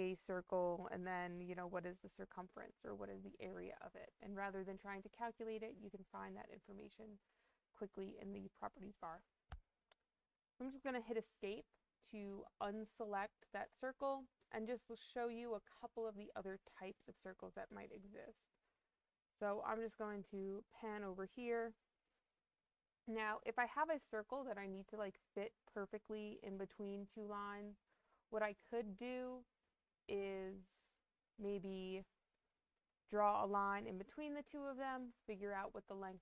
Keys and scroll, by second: 10.6 Escape.